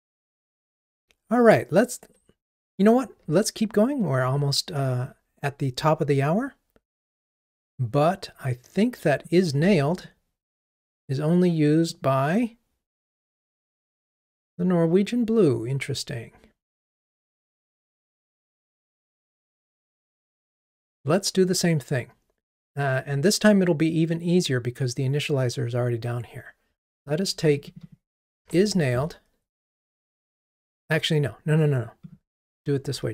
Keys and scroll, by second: 10.1 super+b, 28.5 super+c.